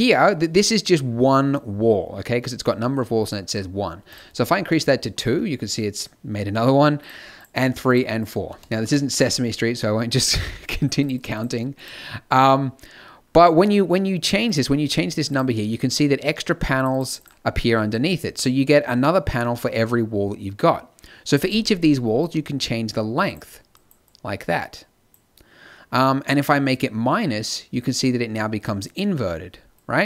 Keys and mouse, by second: 4.6 middle click.